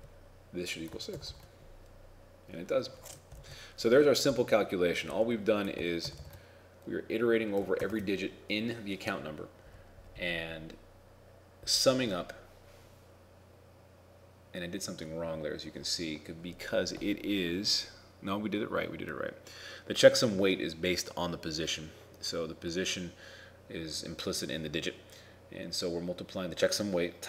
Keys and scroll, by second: 3.5 ctrl+Home, 6.1 ctrl+r, 7.9 ctrl+Tab.